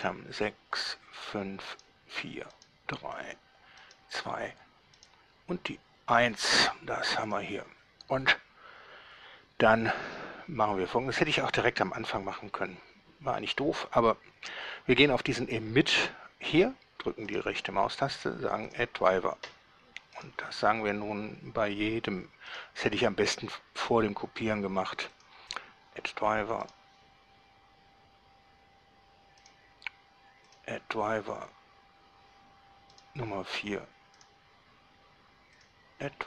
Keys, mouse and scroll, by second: 0.1 click, 1.0 drag, 2.0 drag, 2.7 right click, 4.0 right click, 5.2 right click, 7.4 click, 17.5 right click, 18.8 click, 20.4 right click, 22.7 right click, 25.4 click, 29.6 right click, 30.7 click, 33.1 right click, 34.4 right click, 35.8 click.